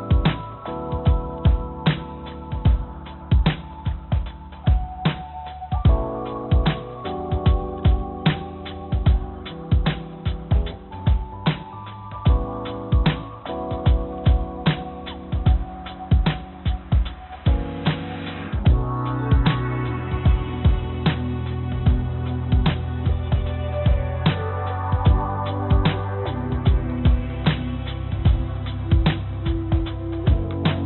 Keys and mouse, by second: 2.7 click, 4.4 click, 5.1 click, 6.3 g, 10.3 click, 11.5 g, 18.2 e, 24.5 g, 26.4 ctrl+z, 27.4 g.